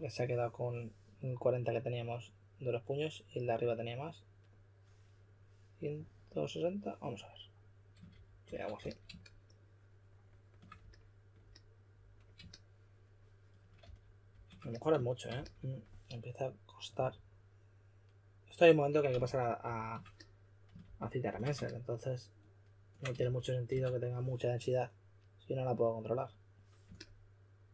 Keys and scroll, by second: 7.8-9.2 typing, 13.8 f, 14.2 f, 15.3 s, 19.2 f, 19.6 f, 20.8 f, 21.2 f, 23.1-23.6 typing.